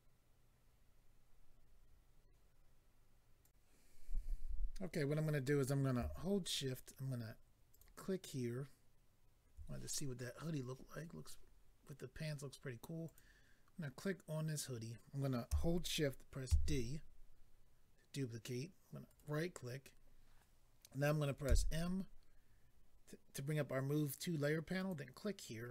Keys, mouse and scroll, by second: 0.9-2.1 scroll down 1, 3.4 click, 3.5 click, 7.7 shift+click, 13.0 click, 17.8 d, 19.1 right click, 24.8 click.